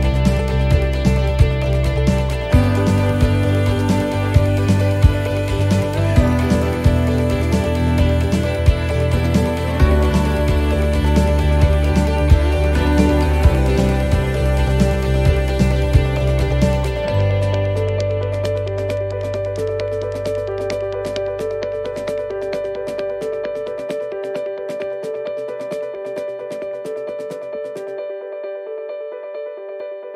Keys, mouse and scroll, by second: 0.7 alt+shift+right click, 2.0 middle click, 2.5-3.4 scroll up 2, 3.7 right click, 4.6 l, 5.6 scroll down 1, 6.5 right click, 6.5 scroll down 3, 8.5-16.2 click, 16.2 scroll up 1, 17.3 middle click, 17.3 scroll up 2, 18.1 scroll up 1, 19.0 right click, 20.4 l, 21.1 l, 21.9 l, 23.7 l, 23.9 l, 25.2 right click, 25.9 l, 27.7 l, 28.2 l, 28.5 l, 29.1 scroll up 1, 29.9 middle click, 29.9 scroll up 2.